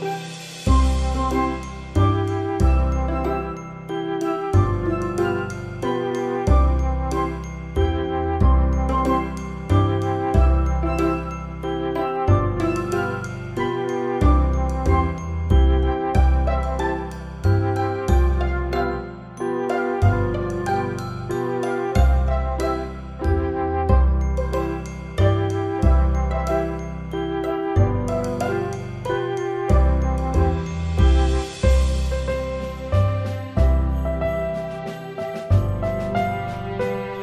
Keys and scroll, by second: 4.7 ctrl+t, 22.7 ctrl+alt+shift+e, 35.8 ctrl+z, 37.0 ctrl+alt+z.